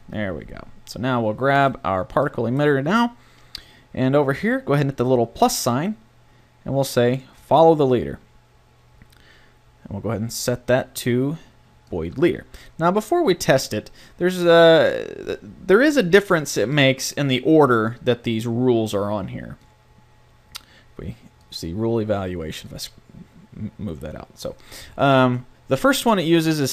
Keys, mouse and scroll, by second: 2.3 right click, 2.7-7.1 drag, 10.4-12.3 drag, 19.6 click, 23.7 click.